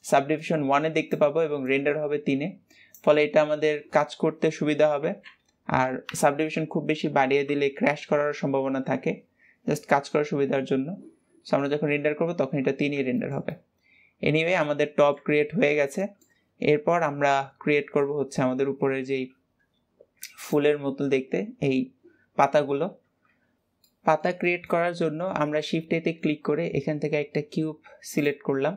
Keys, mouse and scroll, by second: 4.1-5.1 middle drag, 5.1 ctrl+s, 12.9-13.2 scroll down 2, 13.2-15.5 shift+middle drag, 15.5 ctrl+s, 16.0-19.1 shift+middle drag, 23.6-24.8 shift+middle drag, 24.8 shift+a.